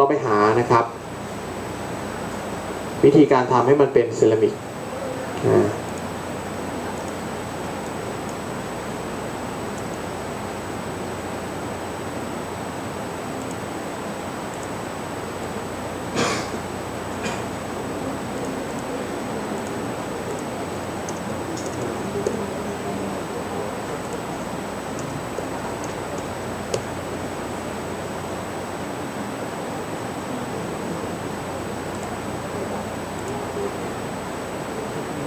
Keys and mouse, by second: 8.2 click, 12.5 shift+a, 16.2-17.2 drag, 19.7 click.